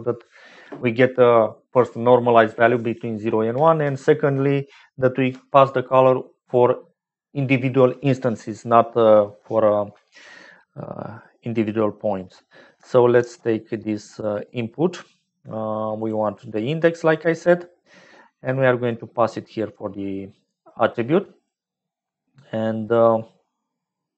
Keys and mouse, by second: 13.1 shift+a, 18.1 click, 18.8-21.4 drag.